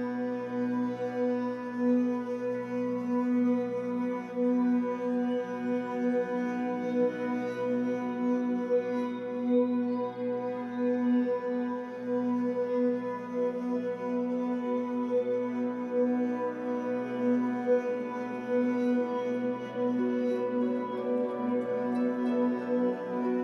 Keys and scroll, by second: 16.2 Escape, 16.4 3, 17.6 w, 21.2 r.